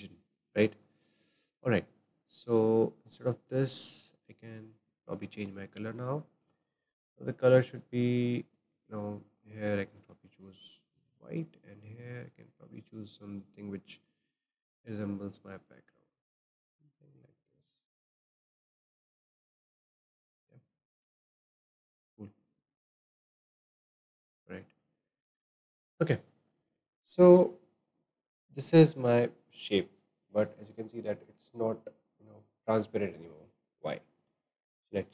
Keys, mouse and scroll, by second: 0.2 scroll up 4, 0.6-6.3 shift+middle drag, 6.1-7.1 drag, 9.9 drag, 12.8 click, 20.9 click, 21.5-27.7 shift+middle drag, 32.6-35.1 middle drag.